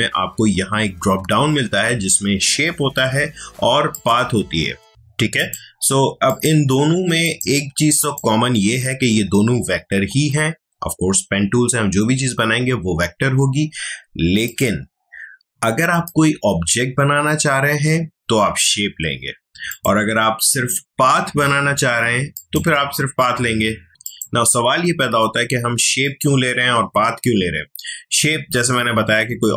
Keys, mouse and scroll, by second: 3.9 click, 14.4 click, 19.7 click, 22.3 click, 24.0 click.